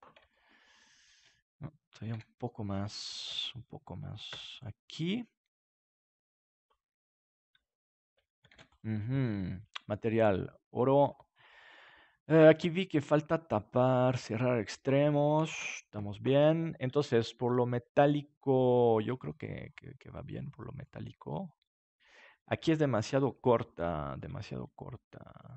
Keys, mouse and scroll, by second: 0.4 middle click, 2.1 KP_7, 4.3 Tab, 5.0 g, 6.4 click, 8.4 ctrl+s, 8.5 middle click, 9.6-11.6 drag, 12.2-15.9 drag, 15.4 ctrl+s, 23.0 KP_7, 23.9-25.4 middle drag, 25.4-25.5 drag.